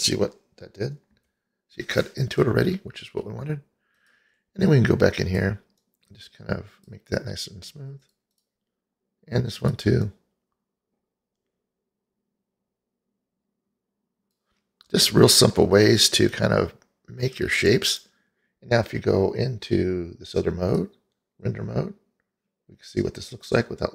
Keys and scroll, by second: 1.3 h.